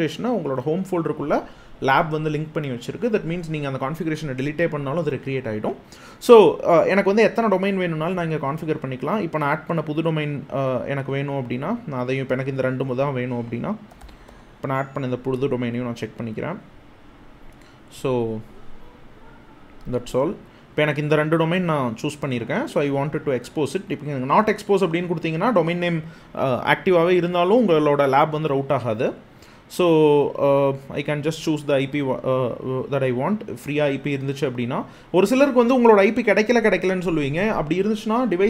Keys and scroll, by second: 13.3-14.5 typing, 17.8 super+a, 18.2 BackSpace.